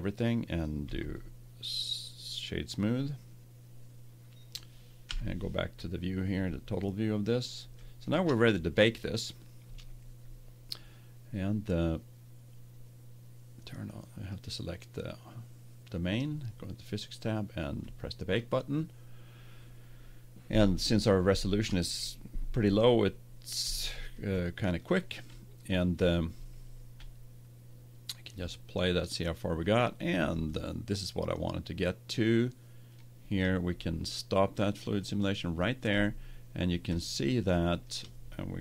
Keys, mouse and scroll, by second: 0.8 w, 5.0 KP_Divide, 5.9 middle click, 9.6 Tab, 14.3-16.0 right drag, 16.0-19.5 drag, 23.8-27.4 middle drag, 28.2-30.6 drag, 31.5-32.5 middle drag, 35.0-36.6 drag, 36.6-38.6 middle drag.